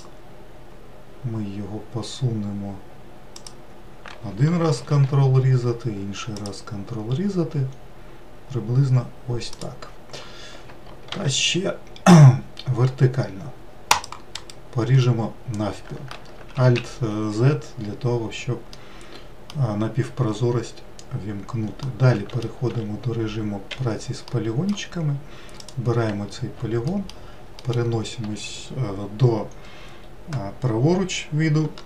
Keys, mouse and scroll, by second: 4.4 ctrl+r, 10.5 ctrl+r, 14.5-16.0 middle drag, 16.0 alt+z, 18.2-22.2 middle drag, 22.2 4, 23.1 3, 23.8-25.1 middle drag, 25.1 click, 26.4 alt+middle click, 27.1 alt+middle click, 31.5 e.